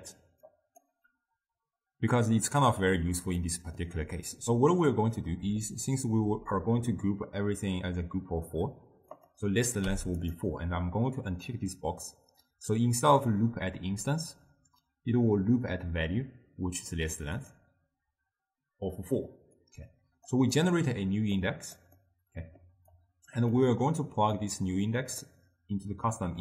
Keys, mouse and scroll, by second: 0.5 click, 3.0-3.4 scroll down 1, 3.4 scroll up 1, 3.5-6.5 middle drag, 9.2-10.4 drag, 17.4 click, 19.6 click, 20.6 middle click, 21.4 click, 22.0 middle click, 23.0 click, 23.6-24.4 middle drag, 24.4-26.4 drag.